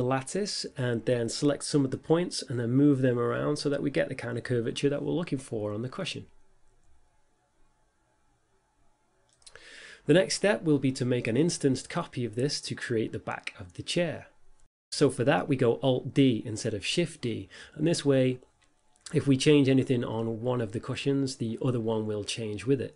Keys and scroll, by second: 3.3 g, 3.5 z, 7.5 s, 7.7 x, 9.7 a, 10.8 g, 10.9 z, 14.3 a, 14.6 Tab, 15.2 a, 21.3 y.